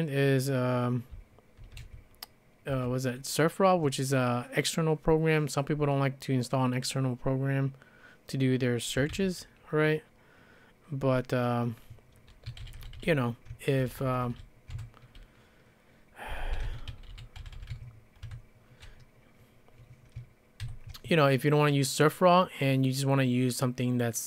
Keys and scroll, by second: 1.4-2.3 typing, 2.7 Return, 8.8-9.6 typing, 12.3-14.5 typing, 14.8 Return, 16.3-18.2 typing, 20.4-21.1 typing.